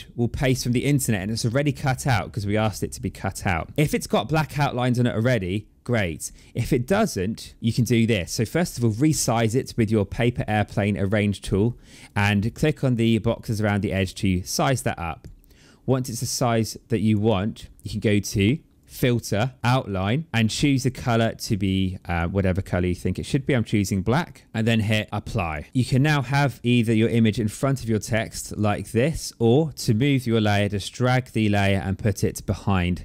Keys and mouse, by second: 3.2 click, 4.1 click, 7.6 click, 8.0 click, 9.4 click, 11.3 click, 12.6 click, 14.4 click, 15.7 click, 18.7 click, 20.4 click, 24.2 click, 25.1 click, 26.2 click, 29.5 click, 30.8 click.